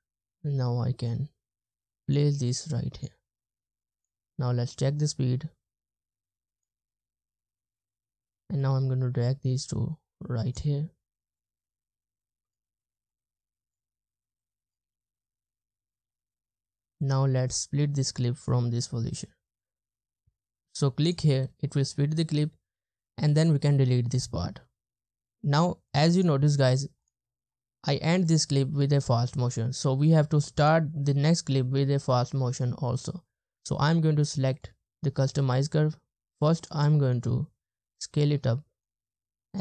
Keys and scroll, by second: 4.2 space, 5.2 space, 6.9 space, 7.8 space, 14.9 space, 16.1 space, 23.8 BackSpace.